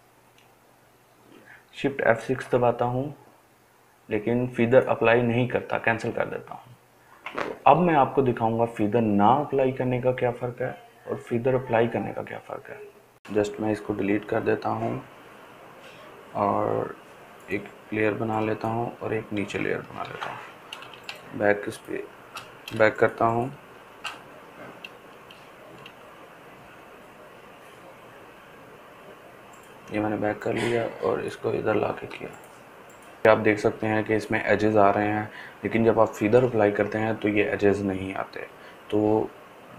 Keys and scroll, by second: 13.5 Delete, 20.0 ctrl+d, 22.7 ctrl+alt+space, 23.2 ctrl+alt+space.